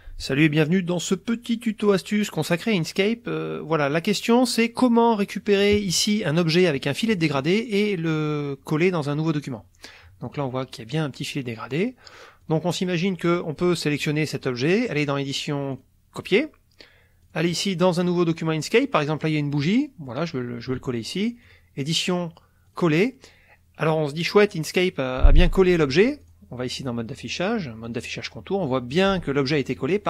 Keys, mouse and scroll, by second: 6.8 click, 10.3 click, 12.0 click, 12.4 click, 13.2 click, 14.9 click, 15.7 click, 17.2 click, 18.0 click, 19.0 click, 19.6 middle click, 21.5 click, 22.7 click, 26.2 click, 27.8 click, 29.1-29.9 drag.